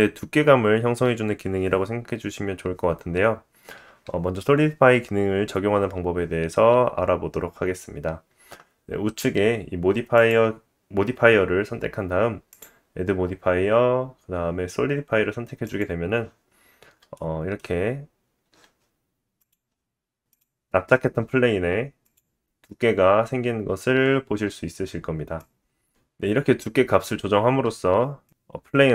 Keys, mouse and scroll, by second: 12.5-17.1 drag, 16.5 scroll up 2, 17.1-19.4 middle drag, 17.6 scroll up 1, 19.4 click, 19.4 scroll up 1, 19.5 middle click, 20.3 click, 20.4-22.0 middle drag, 22.0 click, 22.1-25.4 middle drag, 25.4-28.9 drag.